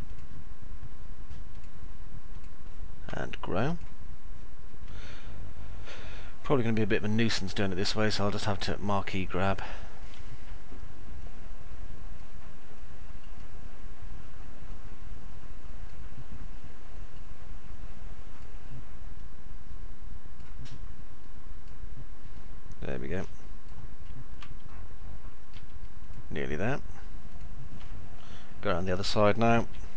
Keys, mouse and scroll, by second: 4.8-9.8 alt+middle drag, 12.5 ctrl+click, 14.7 ctrl+click, 16.8-18.3 ctrl+drag, 19.0-20.3 ctrl+drag, 21.0 ctrl+click, 22.3-23.7 ctrl+drag, 24.7 alt+middle click, 25.8 ctrl+click, 27.8-29.0 alt+middle drag, 29.5 z, 29.8-29.9 alt+middle drag.